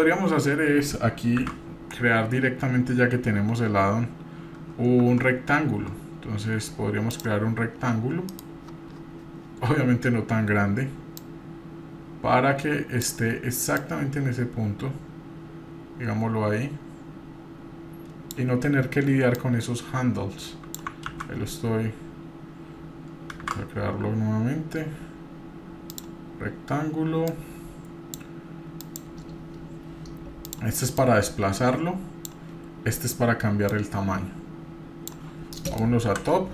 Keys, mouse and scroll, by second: 1.4 shift+a, 7.8-8.3 scroll down 1, 8.3 middle click, 8.3-8.9 scroll down 3, 9.4 scroll down 2, 11.2-13.1 drag, 13.8-18.5 drag, 19.3-20.8 drag, 21.1 ctrl+2, 23.3 shift+z, 27.3 click, 28.8-30.5 drag, 31.0-32.5 drag, 33.7-35.2 drag, 35.5 middle click, 36.0 KP_7.